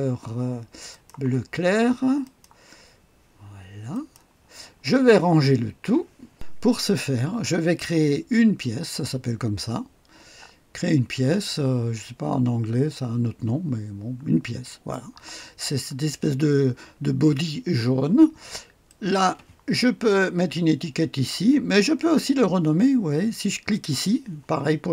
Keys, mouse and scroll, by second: 0.9 click, 2.2 click, 3.9 click, 6.3 click, 14.7 click, 15.6-18.8 scroll down 1, 18.8 click, 23.7 click.